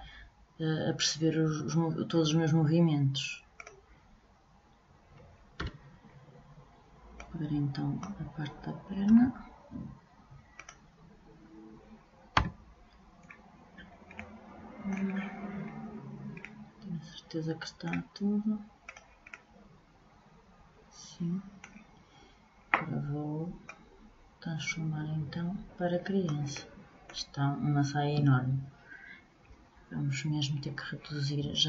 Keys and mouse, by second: 3.1-4.9 drag, 15.8-18.4 middle drag, 18.4-20.8 drag, 23.2-25.1 drag.